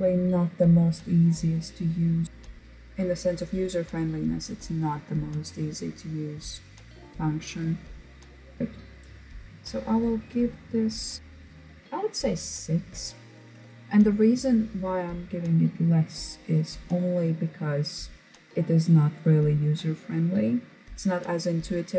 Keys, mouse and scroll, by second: 11.2 click.